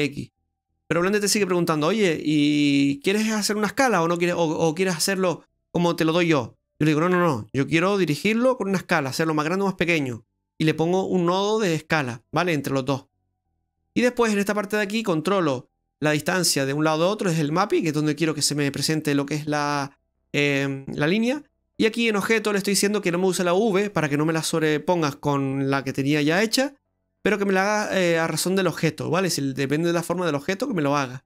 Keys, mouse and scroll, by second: 0.3 middle click, 13.6 middle click.